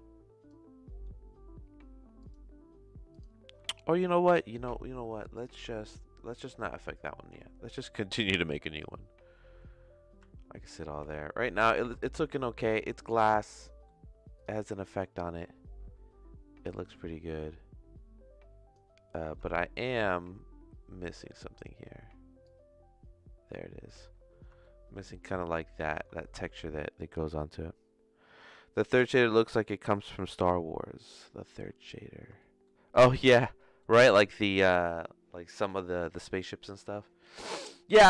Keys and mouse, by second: 2.2 click, 3.1 click, 3.8 middle click, 5.4-7.1 drag, 9.4 z, 12.0 shift+middle click, 12.7 click, 13.6 click, 15.0 middle click, 16.8-18.7 drag, 19.1 middle click, 19.5 shift+middle click, 21.2 ctrl+z, 22.5-23.8 drag, 24.6-25.9 shift+middle drag, 26.4 ctrl+s, 32.4 shift+middle click, 32.9 click, 33.6 middle click.